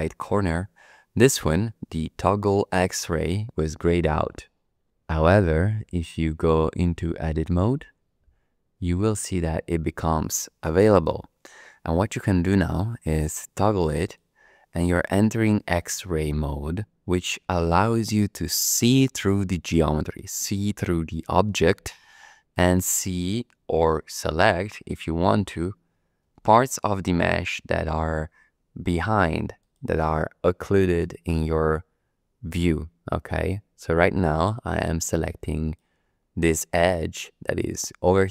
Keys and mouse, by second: 7.3 Tab, 14.0 click, 26.3 2, 29.6 click, 35.6 click, 36.7 middle click, 37.5 click, 37.5 middle click, 37.7 click, 37.7 middle click, 37.8 click, 37.9 click, 38.1-38.3 middle drag.